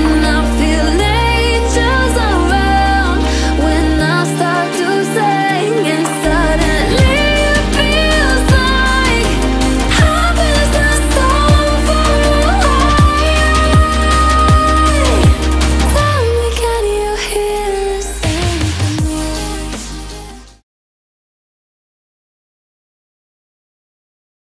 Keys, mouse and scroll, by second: 0.6 click, 2.8 F7, 3.6 alt+scroll up 1, 5.0 click, 6.6 ctrl+2, 7.2 click, 8.6-11.4 alt+shift+drag, 11.4 alt+scroll down 1, 12.3 click, 12.7 alt+scroll up 1, 13.1 click, 14.3 alt+scroll up 1, 15.1 click, 18.7 click.